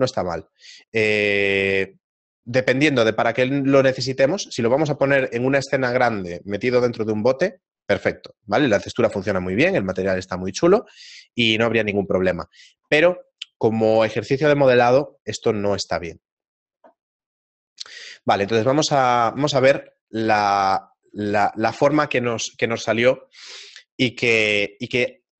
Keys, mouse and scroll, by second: 19.8 middle click, 20.5 shift+middle click.